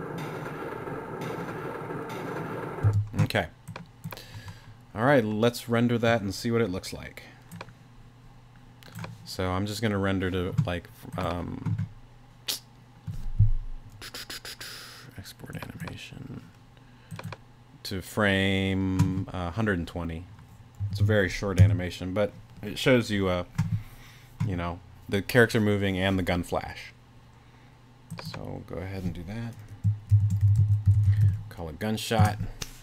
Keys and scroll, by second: 2.8 space, 20.6-21.6 typing, 29.9-31.7 typing, 32.2 Return.